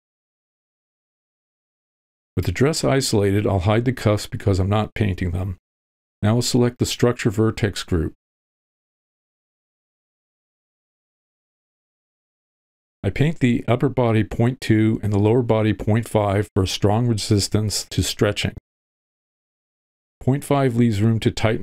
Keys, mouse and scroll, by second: 0.6 ctrl+l, 2.4 shift+h, 4.1 alt+a, 4.9 click, 5.4 click, 6.1 h, 8.1 click, 8.1 h, 11.6 click, 12.0-13.3 drag, 13.4 ctrl+middle click, 14.1 click, 14.2 v, 14.4 click, 15.2 middle click, 15.4-16.5 drag, 16.5 middle click, 17.3 click, 19.6-21.0 drag.